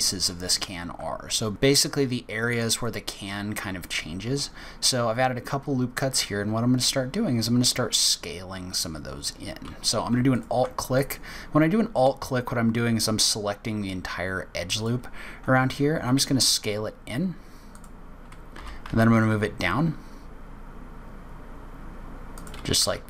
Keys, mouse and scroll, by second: 1.5 ctrl+r, 10.3 alt+click, 11.0 middle click, 14.7 click, 16.0 s, 18.5 g.